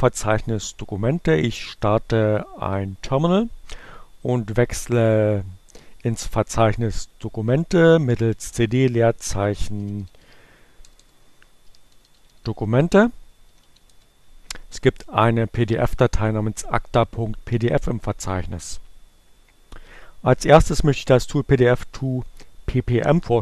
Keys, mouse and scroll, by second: 4.6-5.9 drag, 7.7-13.6 typing.